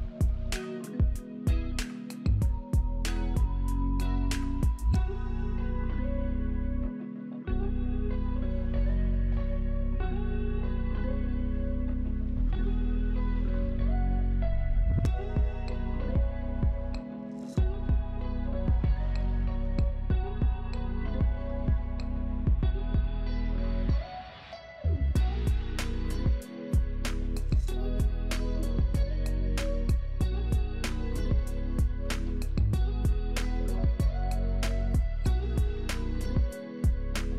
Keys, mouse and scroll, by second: 12.1-13.1 typing, 14.1 right click, 17.3 double click.